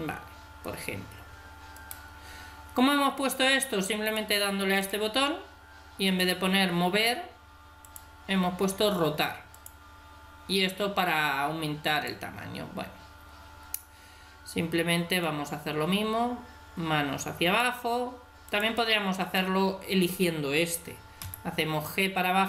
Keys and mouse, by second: 1.8-3.6 drag, 4.0-11.2 drag, 11.9-13.8 drag, 15.2-17.0 drag, 18.5-20.4 drag, 21.2 g.